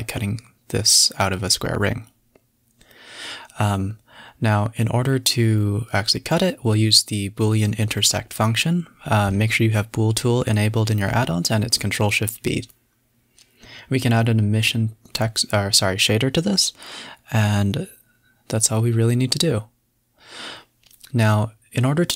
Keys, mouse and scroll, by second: 0.8 middle click, 0.9 scroll up 1, 1.1 space, 3.3 space, 3.5 shift+click, 4.2 ctrl+shift+v, 5.0 ctrl+shift+b, 7.3 middle click, 7.4 space, 7.5-7.9 scroll down 5, 11.2 KP_7, 12.2 click, 13.0 click, 13.4 click, 14.0 click, 14.6-15.7 typing, 15.4 scroll up 2, 18.5 click, 19.1-19.4 scroll up 6, 19.4 middle click, 20.1-21.3 middle drag, 21.3 space.